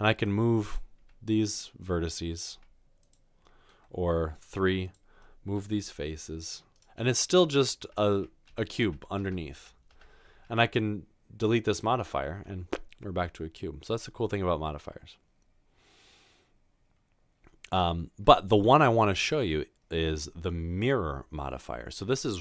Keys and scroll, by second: 1.0 typing, 2.5 typing, 4.5 typing, 5.8 typing, 7.8 z, 8.5 ctrl+z, 8.5 ctrl+z, 8.9 ctrl+z, 9.6 ctrl+z.